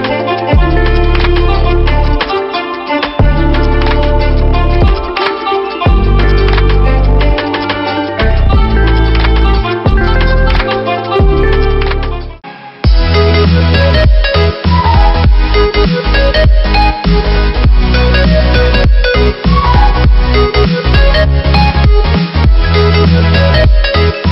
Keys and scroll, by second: 0.8 ctrl+-, 1.4 ctrl+=.